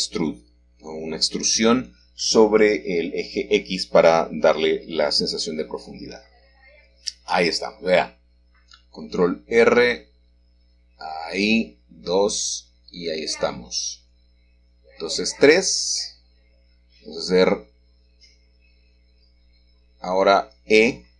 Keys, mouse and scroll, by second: 0.4-2.0 scroll down 1, 2.8-4.2 middle drag, 3.2-4.1 scroll down 1, 4.1 scroll down 1, 5.3 middle click, 5.8 click, 6.6-7.0 scroll up 1, 7.0 Tab, 8.0-9.1 shift+middle drag, 11.5 ctrl+r, 14.2-14.8 scroll up 2, 14.8 click, 15.2 click, 15.8-17.5 middle drag, 18.2 click, 18.6 middle click, 19.0 click, 19.3 middle click.